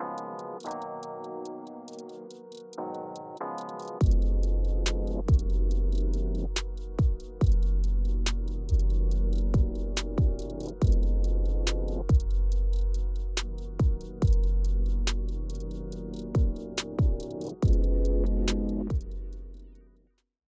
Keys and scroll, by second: 8.5 super+g, 10.5 super+g.